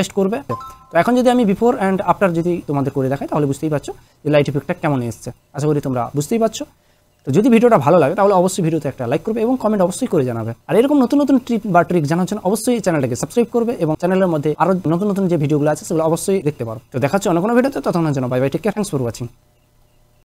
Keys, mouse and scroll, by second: 0.6 click, 5.3 click, 19.4 click.